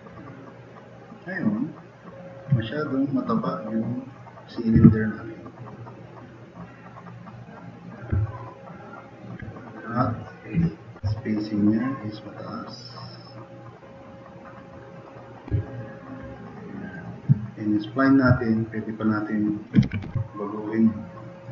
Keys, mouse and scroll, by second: 0.2 click, 1.6 click, 4.8 t, 5.2-8.0 drag, 9.0 drag, 16.5-16.9 drag, 18.6-19.0 right drag, 19.5 click, 19.6-20.5 typing, 21.1-21.5 drag.